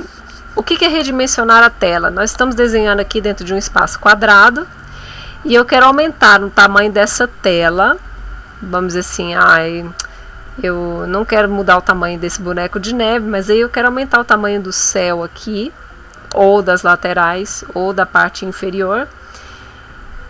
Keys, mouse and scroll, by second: 9.3 scroll down 1, 11.0 click, 15.2 click, 18.9 click.